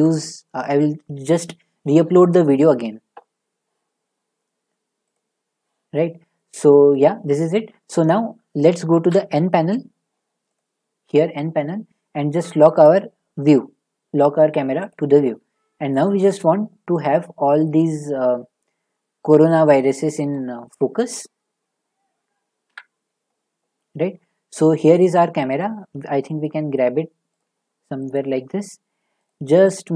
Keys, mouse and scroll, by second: 5.1 click, 9.1 n, 10.5 click, 12.8 click, 14.9 click, 15.7 middle click, 15.7 middle click, 15.8 middle click, 16.1 middle click, 17.5 middle click, 18.5 middle click, 19.0 scroll down 1, 20.6 middle click, 22.7 7, 23.4 scroll down 2, 23.7-25.1 scroll, 25.1 click, 25.1-25.7 scroll, 25.9 g, 27.4 click, 28.1 click, 28.3 g, 29.2 click, 29.9 click.